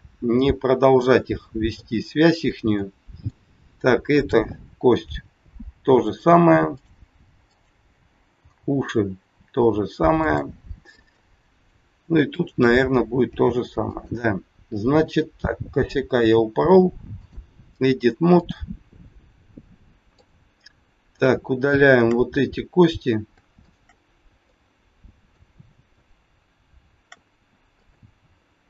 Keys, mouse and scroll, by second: 2.7 middle click, 4.2 click, 5.1 g, 6.7 click, 7.4 click, 8.3 g, 11.1 middle click, 12.3 click, 13.3 g, 15.1 click, 18.3 click, 20.1 click, 21.1 shift+click, 21.2 shift+click, 21.8 click, 22.4 scroll down 1, 23.6 shift+click, 24.5 middle click, 25.8 shift+click, 27.7 shift+click.